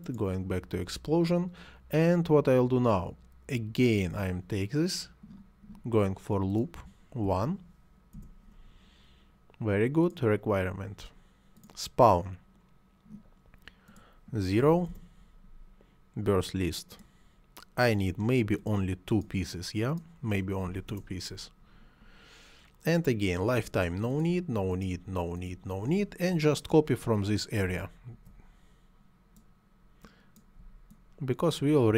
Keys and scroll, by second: 7.1 1, 7.9 Return, 14.4 0, 14.7 Return, 20.5 2, 20.7 Return, 23.4 Delete.